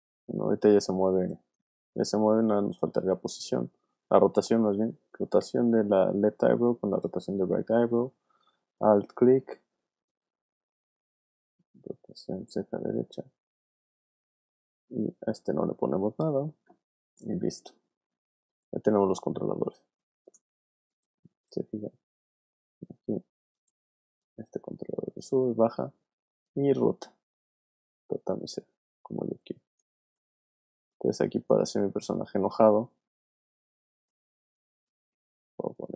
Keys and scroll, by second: 0.7 space, 3.0 super+z, 4.2 super+r, 7.2 r, 8.1 alt+r, 19.8 space, 25.3 super+z, 25.9 super+w, 29.9 super+z, 30.6 super+space, 31.2 space, 34.4 space.